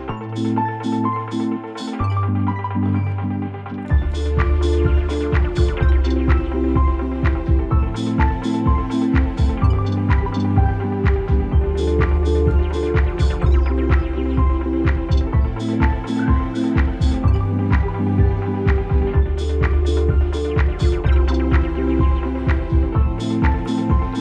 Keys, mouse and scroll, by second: 2.1 click, 3.7 alt+scroll down 1, 4.4 scroll down 2, 4.7 space, 4.9 click, 5.7 space, 5.8 click, 5.8 space, 6.4 alt+scroll up 1, 7.5 click, 8.7 ctrl+t, 9.0 right click, 10.4-15.5 drag, 15.5 space, 15.7-22.1 drag, 23.9 alt+scroll down 1.